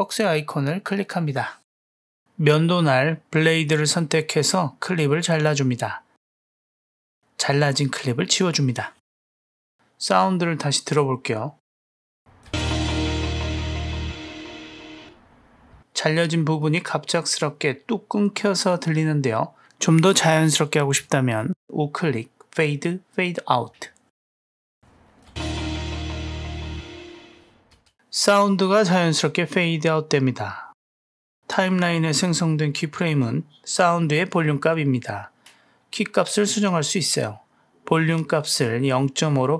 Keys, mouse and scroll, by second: 0.5 click, 7.2 click, 7.9 drag, 8.9 Delete, 9.5 drag, 9.7 Delete, 10.3 Delete, 10.8-12.4 drag, 12.6 space, 15.8 space, 20.2 click, 21.0-24.3 right drag, 24.8-25.2 drag, 25.4 space, 27.8 space, 31.5 Down, 34.9 Up, 37.6 Down, 39.2-39.5 drag.